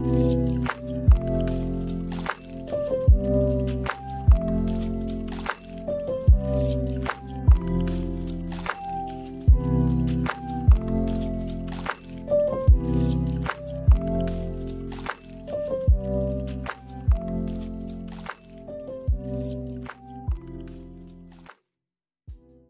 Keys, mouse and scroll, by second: 0.0 middle click, 0.0-0.9 scroll down 3, 0.5 middle click, 0.9 space, 1.6 click, 1.7 click, 2.7 click, 3.4 click, 3.8 click, 4.4-4.7 scroll up 1, 4.7 middle click, 5.8 space, 6.6 middle click.